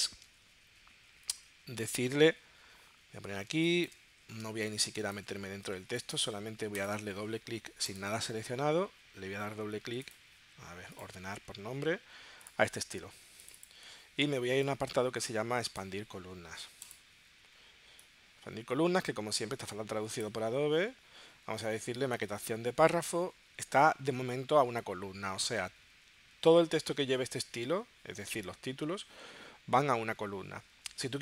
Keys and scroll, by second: 3.5 space, 4.9 space, 5.7 space.